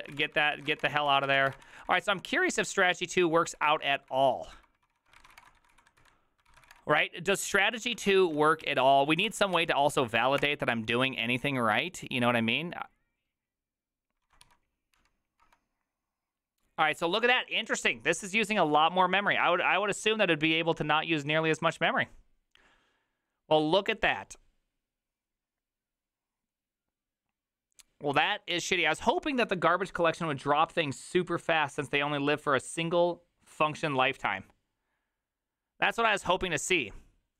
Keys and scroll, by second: 0.0-1.4 typing, 1.3 ctrl+c, 1.6 Return, 1.6 ctrl+d, 1.8 ctrl+d, 2.1 ctrl+d, 2.6-7.1 typing, 7.8 ctrl+a, 8.1-9.1 typing, 8.3 ctrl+a, 9.2 ctrl+c, 9.4 ctrl+c, 9.5 Up, 10.4 Return, 14.4 ctrl+a, 14.4 4, 15.4 Up, 15.4 Return.